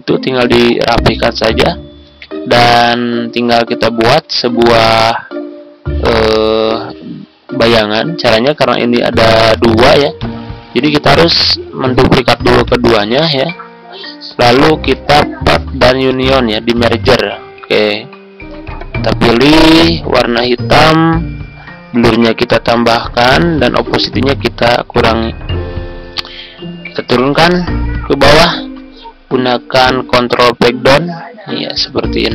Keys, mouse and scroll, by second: 2.0-2.4 ctrl+scroll up 1, 8.7-9.1 ctrl+scroll up 1, 9.4-10.1 ctrl+scroll down 1, 10.1 ctrl+click, 10.9 shift+click, 11.4 ctrl+scroll down 1, 12.2 ctrl+d, 12.6 click, 17.0 ctrl+scroll up 1, 17.5 ctrl+scroll down 1, 20.4-28.3 drag, 28.4-28.8 ctrl+scroll up 1, 30.2 ctrl+Page_Down, 30.8 ctrl+Page_Down.